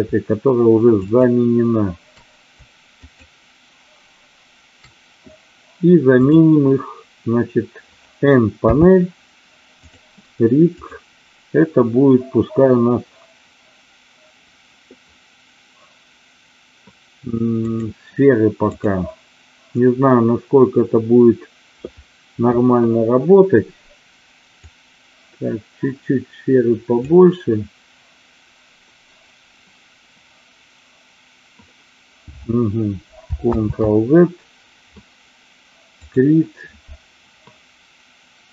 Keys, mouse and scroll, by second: 0.9 shift+click, 7.0 click, 8.5 n, 9.8 click, 10.8-17.7 drag, 18.6-22.1 drag, 24.5-31.5 drag, 33.5 ctrl+z, 36.0-38.5 drag.